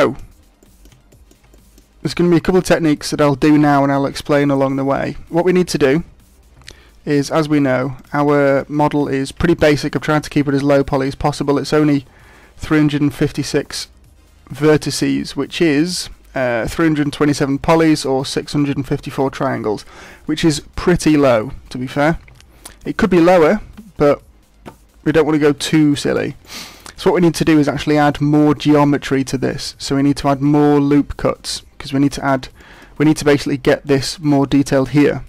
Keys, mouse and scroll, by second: 0.6 middle click, 1.1 shift+middle click, 1.5 middle click, 6.6 Tab, 7.9 click, 9.1 shift+middle click, 9.5 scroll down 3, 11.1 Tab, 13.5 Tab, 22.2 Tab, 25.4 scroll up 1, 25.9 shift+middle click, 26.4 middle click, 32.6 shift+middle click.